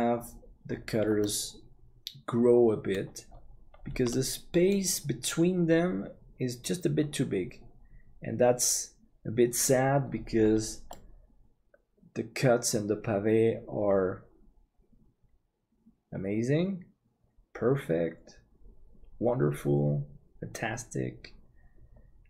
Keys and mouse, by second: 1.2-3.1 middle drag, 4.1 middle click, 10.9-22.2 middle drag.